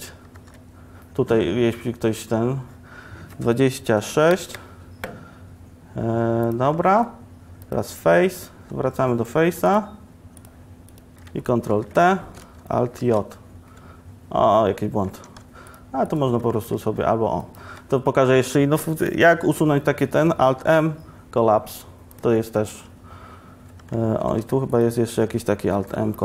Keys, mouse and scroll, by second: 0.4 ctrl+r, 6.9 ctrl+Tab, 11.8 ctrl+t, 13.1 alt+j, 15.4 2, 20.7 alt+m, 25.8 alt+m.